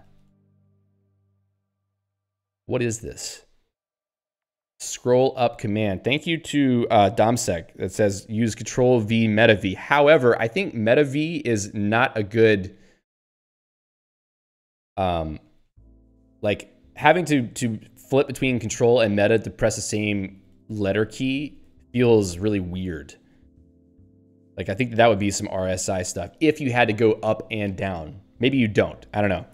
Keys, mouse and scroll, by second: 3.8 ctrl+v, 5.5 click, 13.7 q, 14.6 alt+v, 20.3 ctrl+v, 21.3 alt+v.